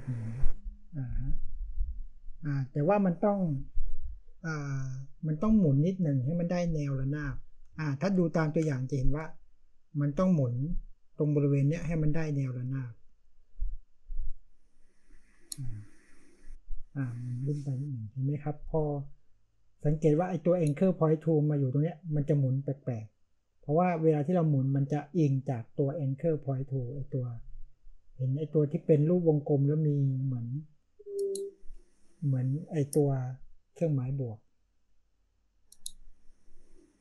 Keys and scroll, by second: 7.6 space.